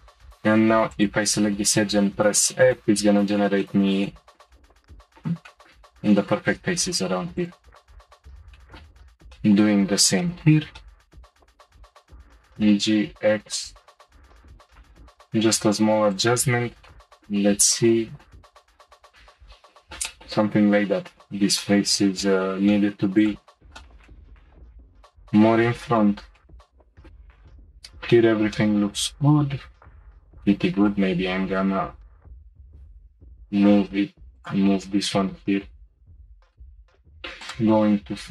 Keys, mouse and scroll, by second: 0.2 2, 0.9 click, 1.8 f, 2.0 f, 2.4 f, 2.7-4.9 middle drag, 5.0-6.8 shift+middle drag, 6.8-7.3 scroll up 1, 7.3 click, 8.4 middle click, 8.6 shift+middle click, 8.9-9.3 scroll down 1, 9.3 shift+middle click, 9.8-10.2 scroll down 1, 10.2-11.6 shift+middle drag, 11.6 middle click, 12.3 g, 14.3 middle click, 14.5-16.1 shift+middle drag, 16.1 click, 16.9 shift+middle click, 17.5-17.9 scroll up 1, 17.9 shift+middle click, 18.3 scroll up 1, 19.0-23.1 middle drag, 23.1 click, 23.8-27.1 shift+middle drag, 27.1 middle click, 27.6-28.1 scroll up 3, 28.1-29.9 middle drag, 29.9 click, 30.5 shift+middle click, 31.4 g, 34.7-36.6 middle drag, 36.9 3, 37.4 click.